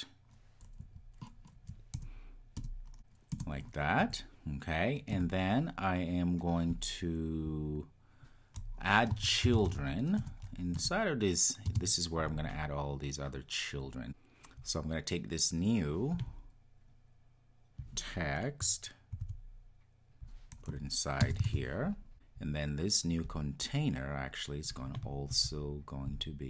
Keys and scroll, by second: 3.3 Return, 10.3 Return, 19.3 super+x, 21.4 super+v.